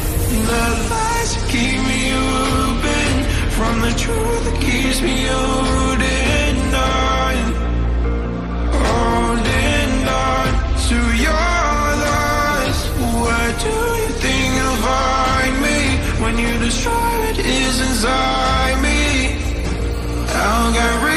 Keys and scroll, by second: 17.9 Right.